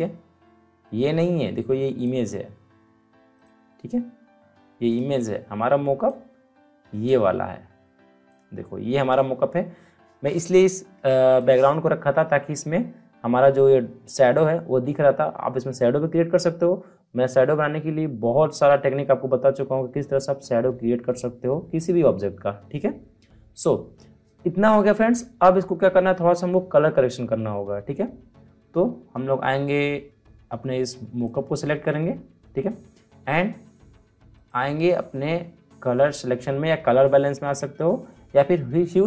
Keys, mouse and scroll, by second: 1.9 click, 11.3 click, 31.1 click, 31.2 click, 34.3 click.